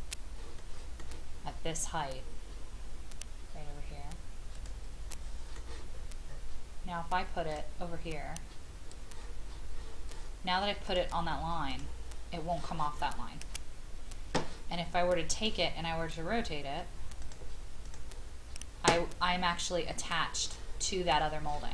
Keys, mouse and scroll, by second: 4.5 click, 5.1 middle click, 5.9-6.3 scroll up 1, 7.5 click.